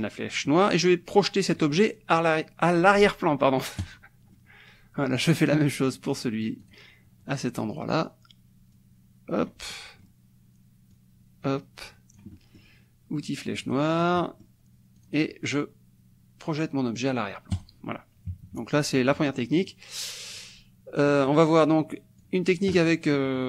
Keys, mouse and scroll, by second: 0.5 click, 3.9 click, 4.4 click, 6.6 click, 7.7 click, 8.7 click, 9.7-12.8 drag, 13.7 click, 15.0 click, 17.5 click, 18.3 KP_Subtract, 19.1 click, 19.5 middle click, 19.7 click, 21.3-22.4 drag, 23.0 click.